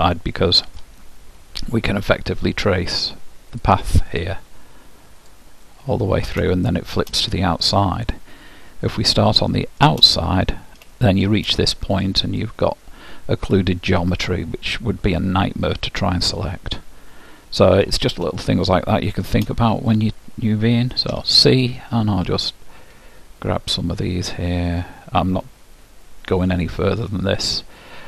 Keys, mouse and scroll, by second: 3.6-7.0 drag, 5.7-14.3 middle drag, 7.7-9.3 drag, 10.3-13.9 drag, 18.5-19.9 middle drag, 19.9-21.7 drag, 21.3 c.